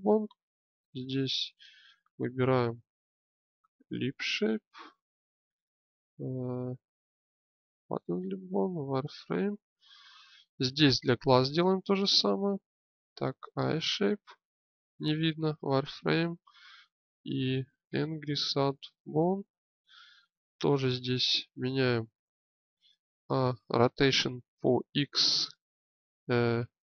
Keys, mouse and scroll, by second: 0.7-12.0 drag, 20.5 click, 21.2-23.1 drag, 22.0 Tab, 23.1 a, 23.9 r, 24.6 x.